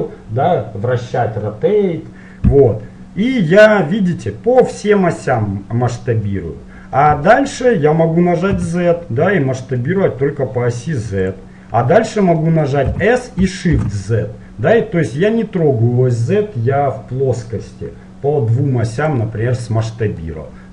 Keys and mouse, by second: 12.9 s, 20.0-20.7 middle drag.